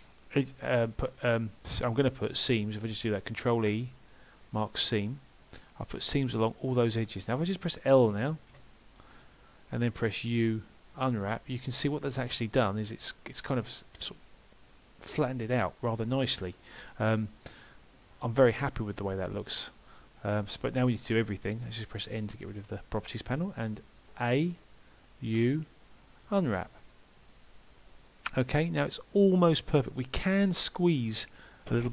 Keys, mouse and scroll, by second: 3.6 ctrl+e, 5.6 middle click, 7.4 click, 8.5 l, 10.3 u, 17.5 middle click.